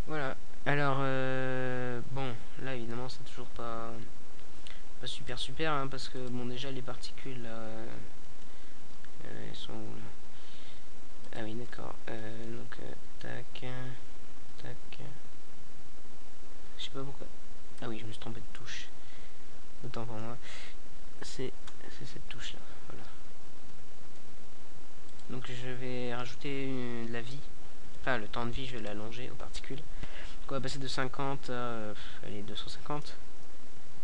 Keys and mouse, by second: 0.2 KP_0, 3.6 KP_Decimal, 6.3 KP_0, 8.3 KP_Decimal, 11.9 KP_Decimal, 13.1 middle click, 17.0-25.4 drag, 25.4 KP_0, 30.3 alt+a.